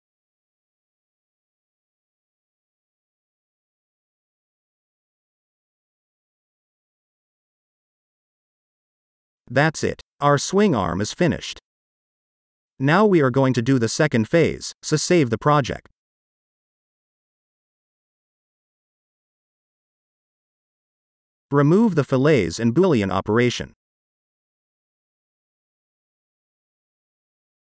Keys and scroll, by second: 8.6 0, 10.5-11.4 typing, 11.9 ctrl+shift+s, 16.4-18.2 typing, 18.4 Return, 21.9 Delete, 23.2 Delete, 27.0 space.